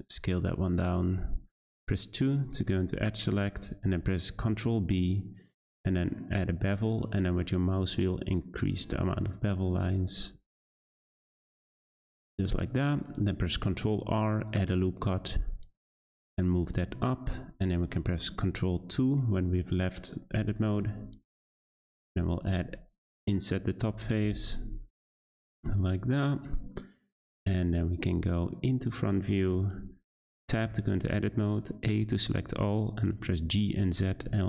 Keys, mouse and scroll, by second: 2.4 click, 2.8-3.6 scroll up 2, 3.8 b, 11.0-12.3 right drag, 12.3 click, 12.8 middle click, 13.7 r, 16.7 Tab, 16.8-17.3 scroll down 2, 17.3-18.8 middle drag, 18.8 ctrl+2, 20.6-20.9 middle drag, 20.9 Tab, 21.3 3, 21.5 click, 22.6 i, 24.0 i, 25.4 Tab, 25.9-28.4 middle drag, 28.4 `, 30.2 Tab, 30.9 a, 33.4 g.